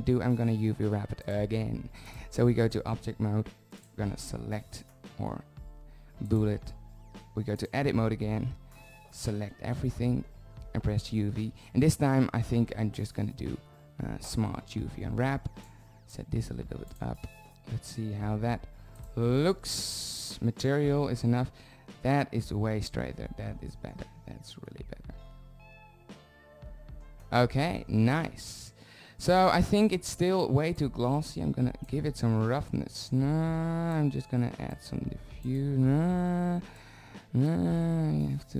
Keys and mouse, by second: 2.0 drag, 3.2 z, 4.2 z, 9.7 a, 9.9 a, 12.2 u, 20.1 click, 25.4 shift+z, 32.3 middle click.